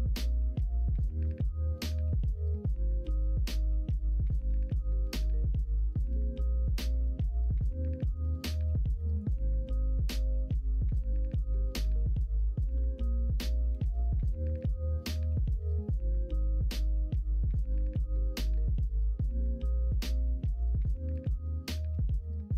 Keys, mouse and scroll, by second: 9.1-10.4 drag, 10.4 s, 12.2 ctrl+z, 14.5 l, 15.4 s, 18.1 s, 19.4 g, 20.8 s.